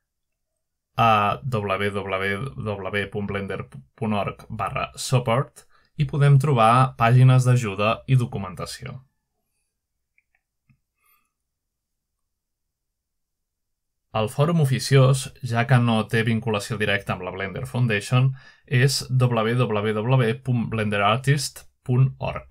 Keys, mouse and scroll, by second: 5.5 ctrl+Tab, 12.3-12.9 scroll down 4, 12.9-13.4 scroll up 2, 13.4 ctrl+Tab.